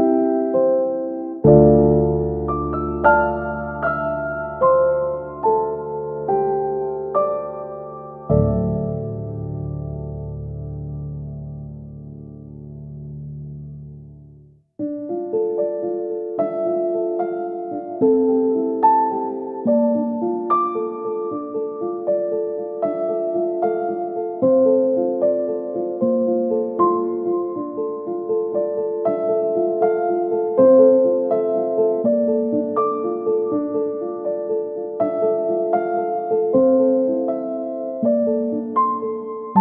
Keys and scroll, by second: 2.1 Delete, 15.5 space, 19.6 shift+Page_Down, 28.2 Escape.